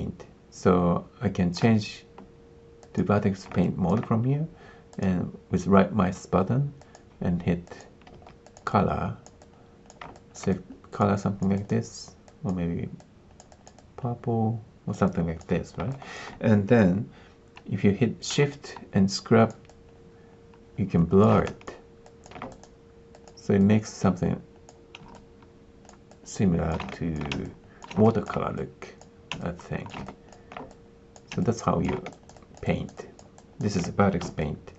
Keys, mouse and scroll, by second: 2.9 click, 3.6 alt+click, 4.8-7.7 drag, 8.1 f, 10.1 alt+click, 11.5-12.9 drag, 15.9 alt+click, 18.5-21.2 shift+drag, 21.4 alt+click, 22.0 alt+click, 22.5 click, 23.6 click, 26.9 alt+click, 28.0 alt+click, 28.5 click, 29.3 shift+click, 30.0 alt+click, 32.0 alt+click, 32.3 alt+click, 32.6 alt+click, 33.3 alt+click, 34.3 alt+click.